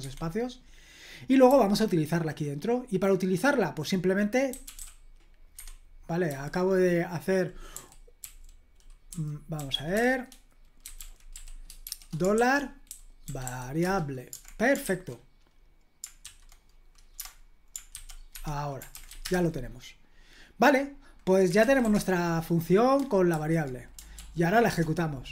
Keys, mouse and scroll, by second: 0.0 Escape, 1.5 j, 4.3-5.2 typing, 5.5 Escape, 7.7-13.9 typing, 17.9-19.6 typing, 18.3 Escape, 21.4-22.3 typing, 23.3 super+h, 24.2 ctrl+p, 24.7 Return.